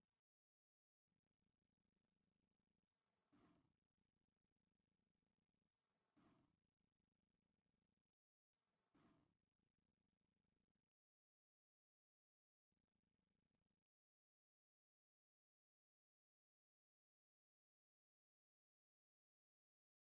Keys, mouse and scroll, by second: 3.5 x, 4.2 middle click, 5.0 middle click, 6.4 click, 7.2 click, 8.5 v, 9.0 right click, 10.1 click, 10.6 ctrl+x, 11.6 click, 12.2 shift+click, 13.4 f, 13.9 a, 15.4 click, 16.2 click, 16.7 x, 18.1 middle click.